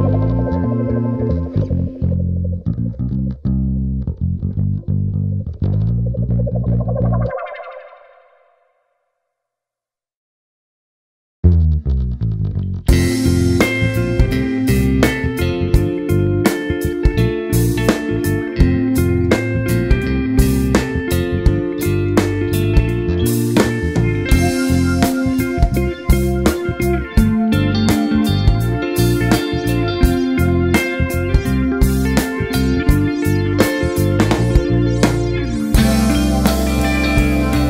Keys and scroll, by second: 25.1 [, 27.7 [, 34.5-35.4 typing.